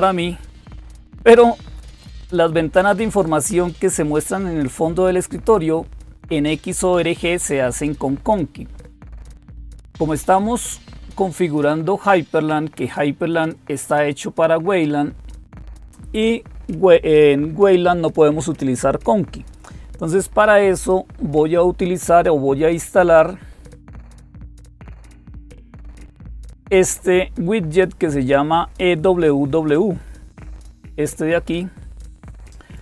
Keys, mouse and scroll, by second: 1.8 click, 13.0 click, 22.7 click, 31.9-32.8 drag.